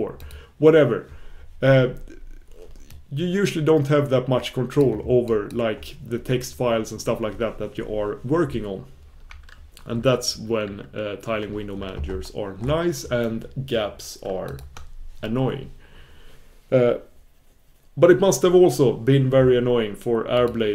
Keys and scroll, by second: 10.6 super+f, 14.7 super+f.